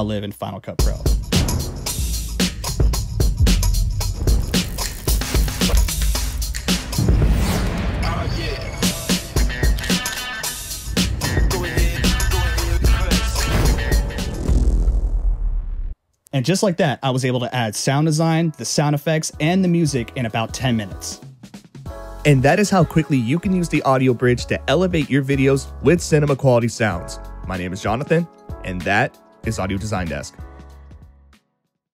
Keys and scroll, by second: 0.6 space, 15.9 space.